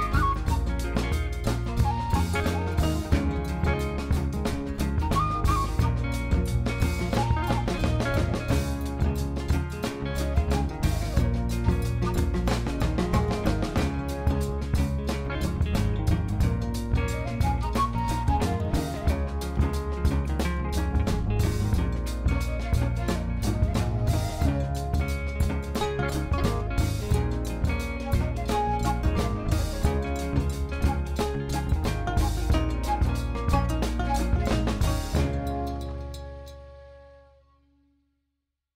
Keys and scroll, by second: 8.0 alt+a, 12.1 3, 13.2 shift+d, 16.5 e, 18.5 2, 20.7 ctrl+b, 22.7 3, 23.0 ctrl++, 26.9 ctrl+r, 28.5 Return, 29.0 ctrl+b, 30.8 1, 31.9 shift+z, 33.3 shift+z, 35.2 Tab, 38.1 shift+z.